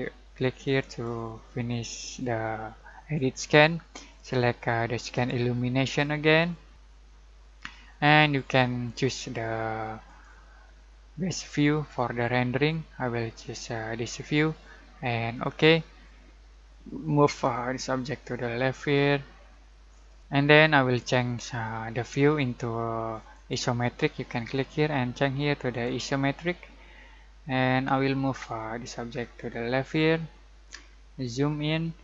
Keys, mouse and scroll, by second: 0.6-4.0 drag, 5.1 click, 10.0 click, 15.3 click, 17.5-20.2 ctrl+middle drag, 20.2 click, 23.3 click, 25.8 click, 28.3-30.9 ctrl+middle drag, 30.9-32.0 scroll down 1.